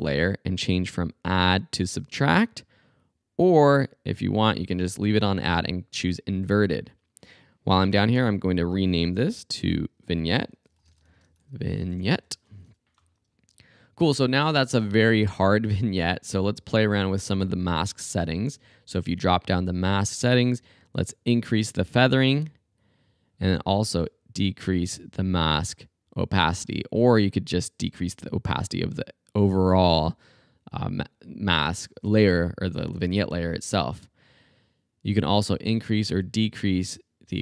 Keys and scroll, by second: 8.2 Return, 10.4-13.1 typing.